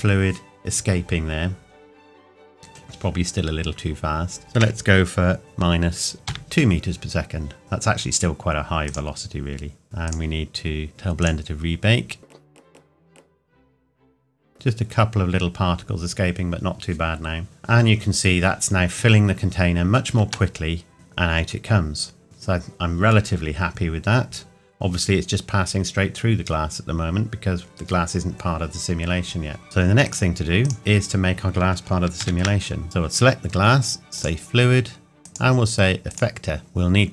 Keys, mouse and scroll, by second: 4.4 click, 4.6 KP_Subtract, 6.1 KP_2, 7.6 click, 20.3 shift+Num_Lock, 20.5 shift+middle click, 29.6 shift+middle click, 30.0 click, 32.8 click.